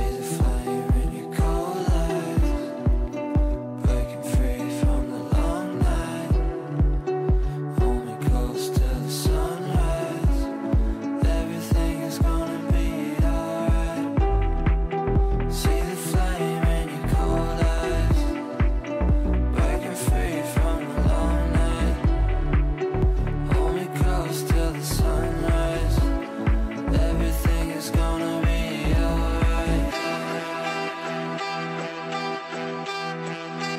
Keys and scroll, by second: 11.5 Escape, 15.5 shift+Page_Down, 22.1 shift+F2, 23.0 Escape.